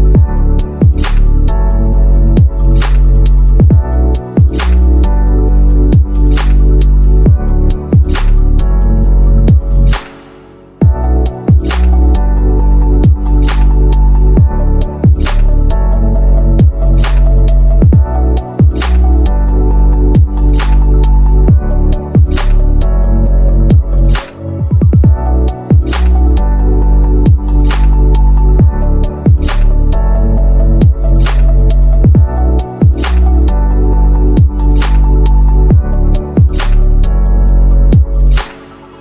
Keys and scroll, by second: 8.1 BackSpace, 24.8 space, 27.2 space, 27.8 z, 34.3 ctrl+z, 37.3 ctrl+z, 37.8 z, 38.4 space, 38.8 z.